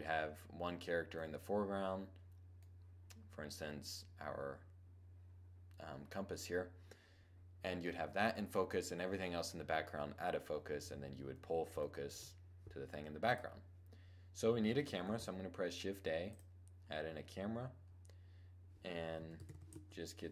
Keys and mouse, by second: 2.9-4.8 middle drag, 10.1-10.5 middle drag, 10.5 KP_7, 13.0-14.7 drag, 14.7 shift+a, 18.9 r.